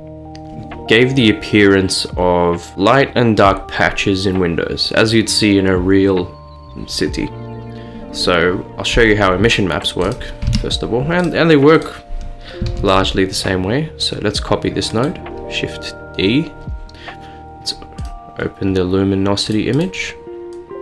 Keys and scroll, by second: 10.5 a, 12.7 d.